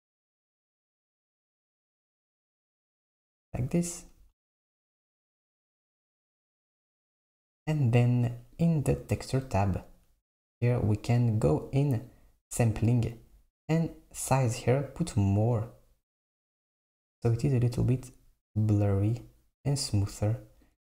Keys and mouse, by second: 8.7 click, 12.1-15.1 drag, 15.6-18.8 drag, 18.9-20.9 drag.